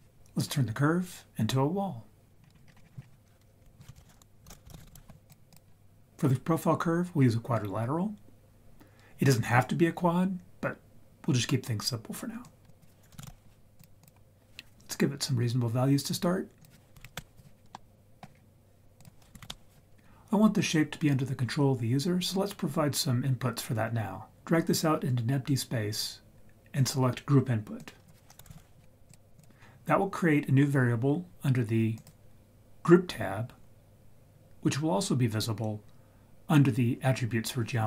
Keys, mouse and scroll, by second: 2.4-2.8 scroll down 5, 2.6 scroll up 1, 2.8 scroll down 1, 3.6 ctrl+z, 4.0 shift+a, 12.4-14.0 drag, 16.6 click, 17.7-18.2 middle drag, 18.3-19.0 scroll up 2, 19.0 click, 24.3 click, 27.8-29.4 drag, 31.9 click, 35.3 click.